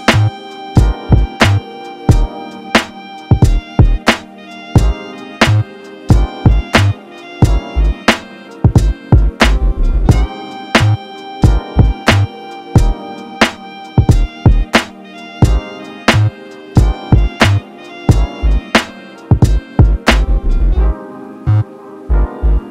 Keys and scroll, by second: 11.1 ctrl+t.